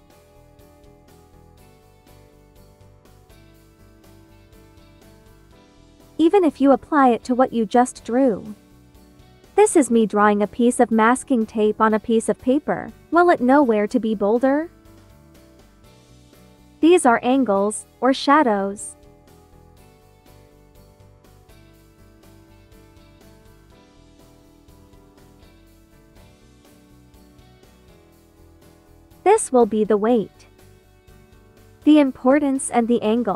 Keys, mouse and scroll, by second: 1.8 space, 2.6 click, 2.8 space, 3.6-6.0 drag, 7.8 space, 7.9 click, 11.5 space, 11.7 click, 14.9 1, 15.4 space, 15.5 click, 16.9 ctrl+z, 16.9 ctrl+click, 19.6 ctrl+z, 19.7 ctrl+click, 20.0 ctrl+z, 20.1 ctrl+click, 21.3 ctrl+z, 21.4 ctrl+click, 22.6 ctrl+z, 22.7 ctrl+click, 23.9 space, 24.0 click, 24.4 space, 25.5 click, 25.7 ctrl+z, 25.9 ctrl+click, 29.1 space, 29.2 click, 29.6 space, 31.6 click, 32.3 space, 32.6 click, 32.9 space.